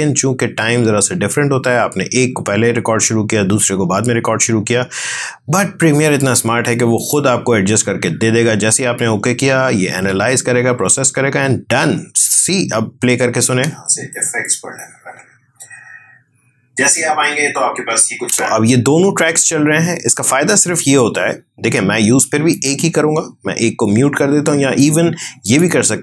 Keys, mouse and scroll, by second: 6.9 click, 13.4 space, 18.1 space, 22.4 click, 24.7 click.